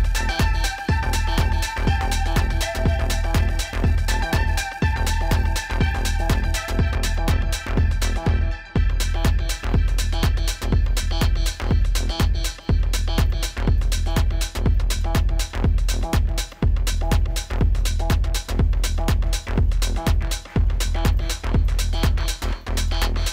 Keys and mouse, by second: 1.5 z, 3.0 z, 3.8 ctrl+z, 4.5 alt+click, 5.8 z, 8.2 click, 8.8 click, 9.3 alt+click, 10.6 z, 10.9 alt+click, 12.5 click, 12.9-16.4 typing, 13.7 ctrl+z, 13.9 alt+click, 17.3 click.